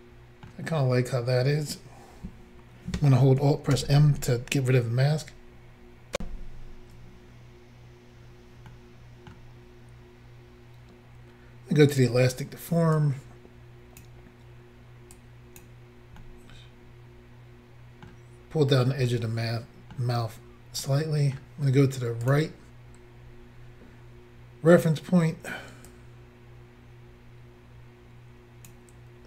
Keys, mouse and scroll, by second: 3.8 alt+m, 6.2 Insert, 8.7 middle click, 11.9 click, 12.0 click, 13.0 click, 15.2 click, 16.2 middle click, 19.1 middle click, 20.9 middle click, 22.3 click, 23.0-23.6 scroll up 2, 25.9 click.